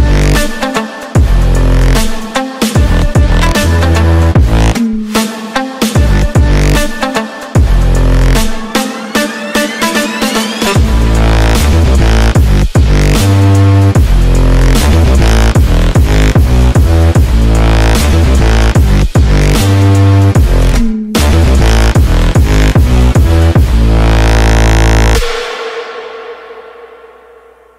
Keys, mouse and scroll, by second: 0.0-2.3 typing, 5.7 click, 6.8 click, 7.5 click, 8.8 click, 9.3-10.2 typing, 11.3 Tab, 15.2 click, 17.3 click, 18.0 click, 19.0 click, 21.1 click, 21.7 click, 22.6 click, 25.2 click.